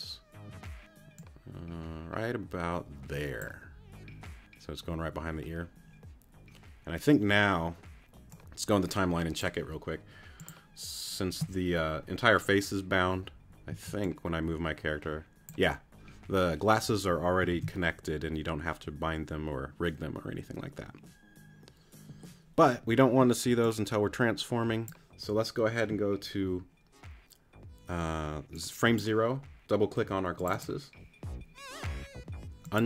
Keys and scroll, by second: 13.7 z, 17.5 super+z.